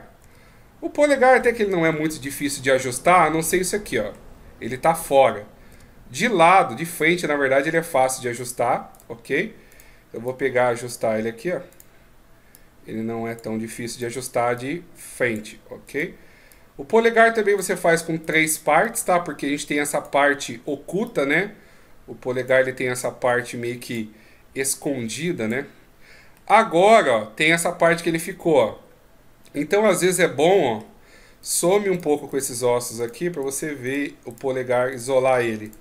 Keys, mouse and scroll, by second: 0.0 KP_1, 1.1-1.6 scroll up 1, 1.6-2.2 scroll up 4, 2.2 middle click, 5.4 KP_1, 6.6 right click, 8.7 right click, 9.5 right click, 10.0 click, 11.5 right click, 12.3 click, 13.7 right click, 14.3 click, 15.6 right click, 16.2 click, 18.0 right click, 18.6 click, 20.8 click, 26.1 middle click, 31.2 right click, 31.7-34.3 shift+right click, 34.7-35.8 shift+right click.